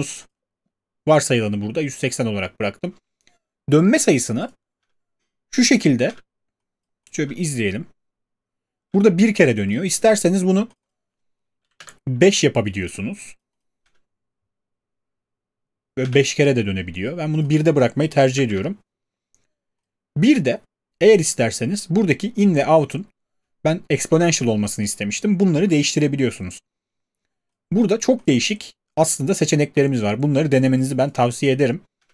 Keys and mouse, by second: 4.8 space, 6.1 space, 7.2 space, 8.8 space, 11.6 5, 11.8-12.2 Return, 13.8 space, 16.0 space, 18.4 1, 18.4 Return, 32.0 space.